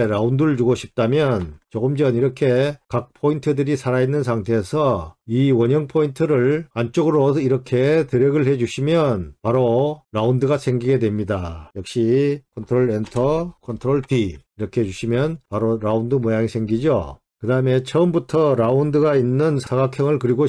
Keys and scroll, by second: 12.6 ctrl+Return, 12.6 ctrl+d.